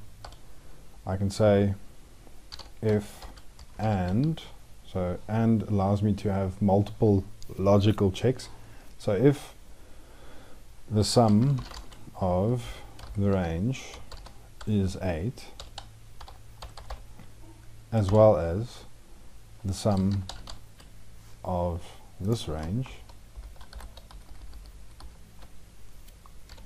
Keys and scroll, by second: 12.9 ctrl+shift+Left, 22.7 ctrl+shift+Right, 23.5 ctrl+shift+Left.